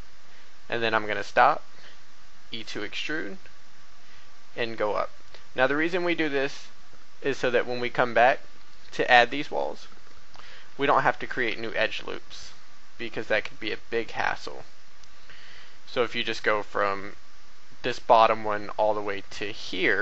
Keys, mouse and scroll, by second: 1.3 e, 2.6 y, 5.8 click, 6.3 a, 8.9 b, 9.2-11.0 drag, 11.4 e, 12.0 x, 15.8 click, 16.6 shift+middle click, 19.6 click.